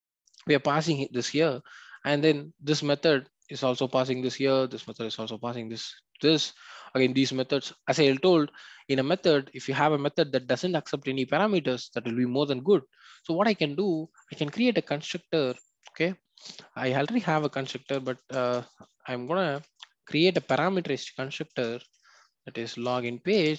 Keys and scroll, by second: 20.4 Return, 23.3 Return.